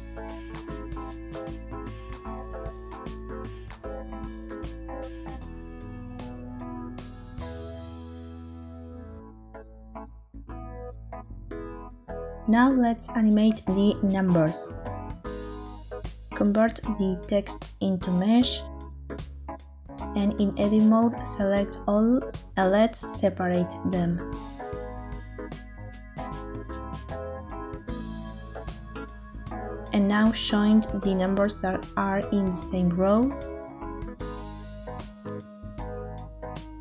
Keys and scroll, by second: 11.3 space, 20.2 Tab, 22.3 a, 23.8 F3, 25.8-27.6 typing, 32.4 Tab.